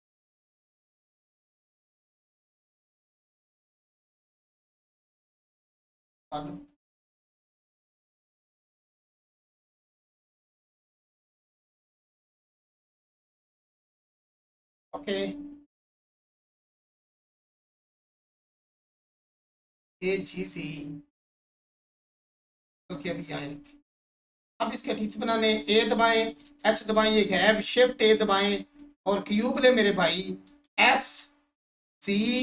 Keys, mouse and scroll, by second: 0.7 click, 5.4 BackSpace, 7.7 BackSpace, 10.2 BackSpace, 13.9 click, 17.6 1, 18.2-18.7 scroll down 1, 18.8-22.6 alt+shift+drag, 22.6 right click, 23.1-23.5 scroll up 1, 23.6 alt+click, 24.2 scroll down 1, 27.0-27.5 scroll down 1, 28.8 click, 32.1 click.